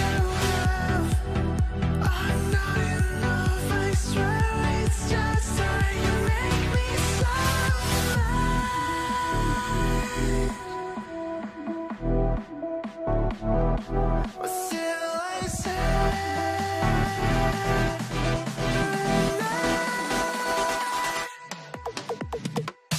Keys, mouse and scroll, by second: 9.3 7, 9.8 Return, 12.6 middle click, 13.0 scroll down 1, 16.9-18.4 scroll down 1.